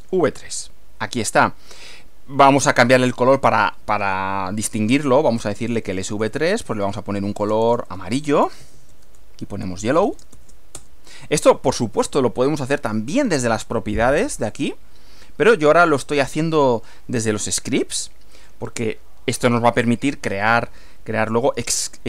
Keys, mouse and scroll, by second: 1.2 click, 2.6 click, 5.3-10.9 typing, 13.1 click, 14.4 click, 18.4 click.